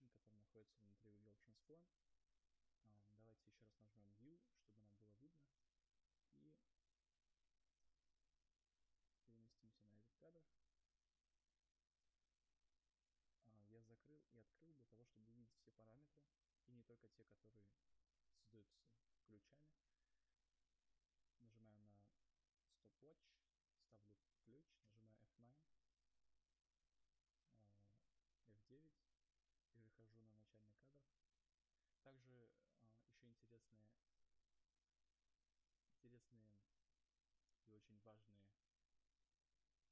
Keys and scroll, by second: 6.1 u, 28.0 F9.